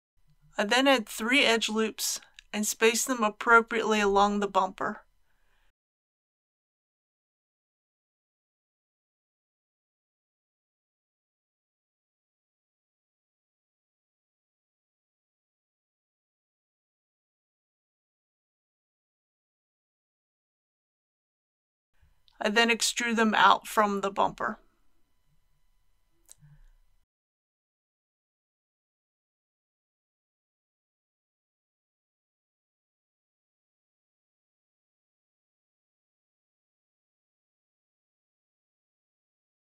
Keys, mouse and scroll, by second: 0.1 click, 1.4 ctrl+r, 2.6 click, 7.0 ctrl+r, 8.2-8.9 scroll up 1, 8.9 click, 10.3 s, 10.6 x, 12.2 click, 12.7-13.8 typing, 14.8 click, 15.3 typing, 17.2 click, 19.7 3, 20.9-22.3 middle drag, 22.8 click, 24.2 shift+click, 24.8 shift+click, 25.5 shift+click, 26.1 middle click, 28.2 shift+click, 29.3 shift+click, 30.1-31.3 middle drag, 32.4 alt+e, 33.2-34.3 drag.